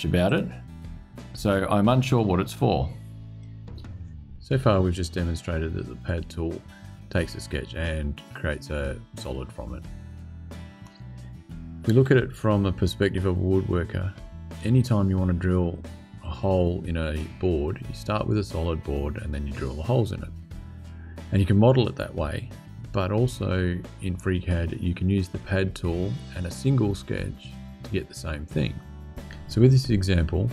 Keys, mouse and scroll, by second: 0.0 click, 3.1 click, 8.9-19.5 scroll down 2, 19.5-30.5 scroll down 1.